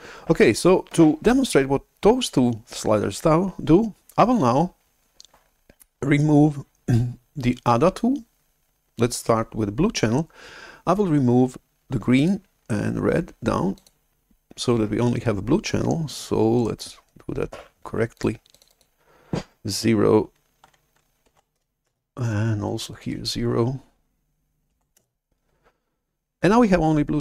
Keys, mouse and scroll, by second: 12.1 click, 13.7 click, 16.7 right click, 18.1 click, 18.4 click, 20.9-21.9 typing, 22.7 click, 23.0 click, 24.9 Return, 24.9 0.